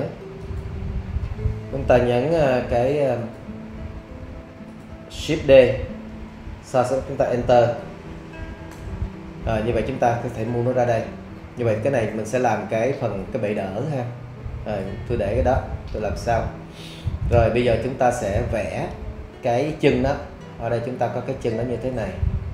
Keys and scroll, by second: 6.1 shift+d, 8.7 Return.